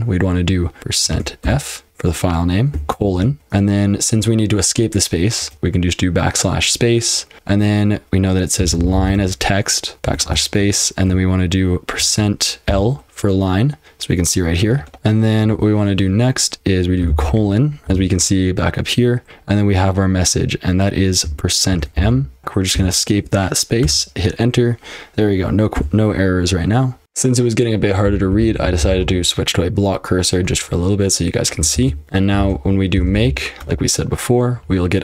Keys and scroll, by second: 0.8-3.9 typing, 5.4 typing, 8.4-10.3 typing, 12.0-12.7 typing, 17.1 :, 17.9 :, 21.5-23.2 typing, 23.8 Return, 25.7 q, 27.0 F12, 27.8-29.3 typing, 32.0 ctrl+p, 32.0 Return, 32.4-33.7 typing.